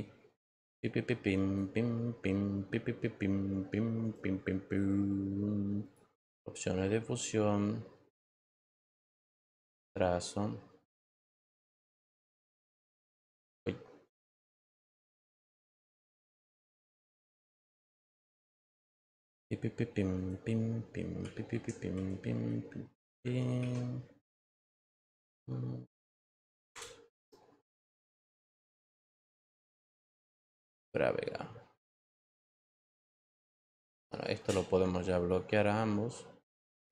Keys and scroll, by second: 23.5 ctrl+t.